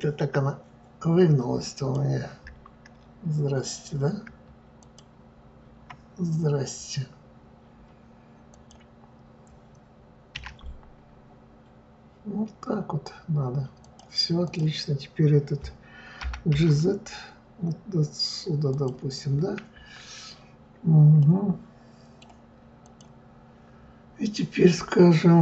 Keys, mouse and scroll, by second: 1.7 click, 4.8 shift+click, 8.5 click, 10.3 r, 14.4 click, 16.2 g, 21.2-22.8 middle drag, 22.8 click.